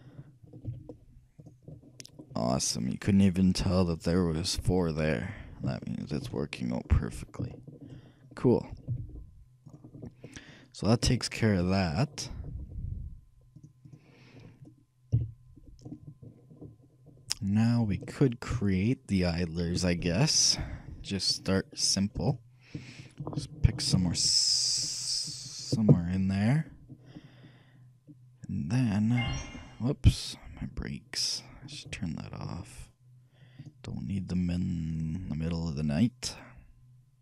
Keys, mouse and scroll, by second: 0.8 z, 1.9 middle click, 5.9-7.9 shift+middle drag, 6.4 shift+a, 9.0 z, 12.9 shift+middle click, 13.7-15.7 shift+drag, 15.2 KP_3, 16.7 middle click, 18.2-19.9 middle drag, 23.0-24.9 shift+drag, 28.8-31.1 middle drag.